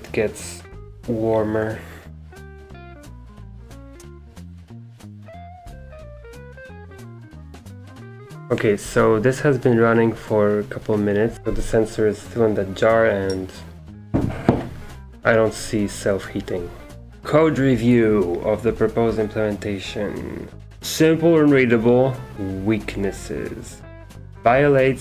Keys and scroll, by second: 11.3 super+2.